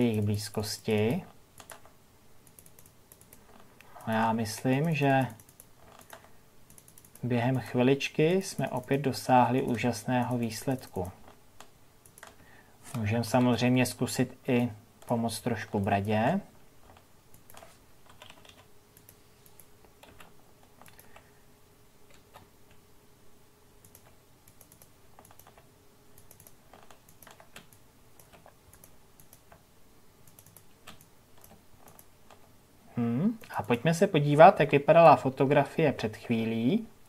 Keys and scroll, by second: 13.2 ctrl+KP_Subtract, 34.9 ctrl+KP_Subtract.